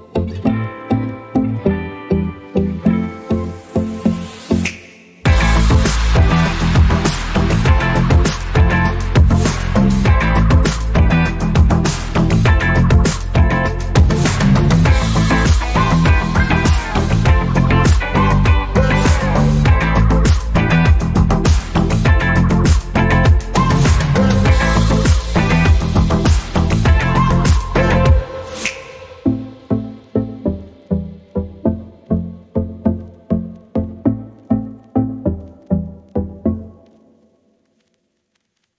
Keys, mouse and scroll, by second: 1.1 alt+scroll down 1, 1.4 alt+scroll up 1, 2.6 click, 3.6-4.9 scroll up 1, 5.5 click, 15.5 alt+Num_Lock, 15.8 scroll up 1, 17.0 click.